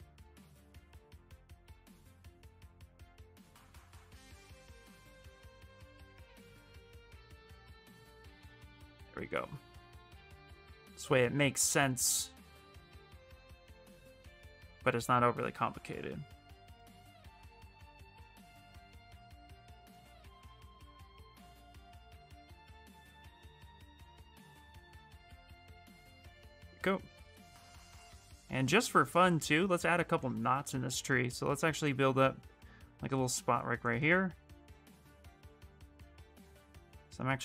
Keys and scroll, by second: 11.4 ctrl+z, 16.3 ctrl+z, 31.9 s.